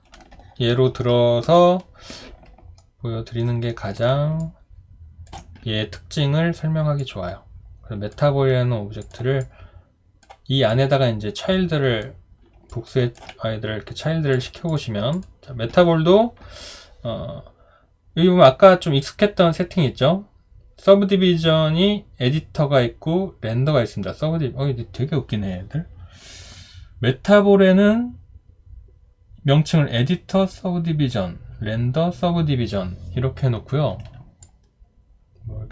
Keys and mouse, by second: 0.3 alt+click, 2.8 alt+right click, 3.7 alt+middle click, 4.4 ctrl+click, 12.7 alt+click.